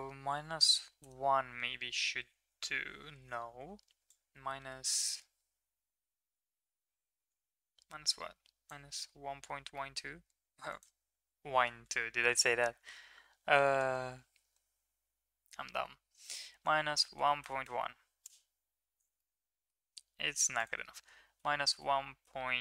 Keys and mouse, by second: 4.0-8.7 shift+drag, 9.7 middle click, 10.6-13.7 drag, 13.9 KP_1, 14.4 KP_Enter, 19.1-19.6 middle drag, 20.6-22.6 drag.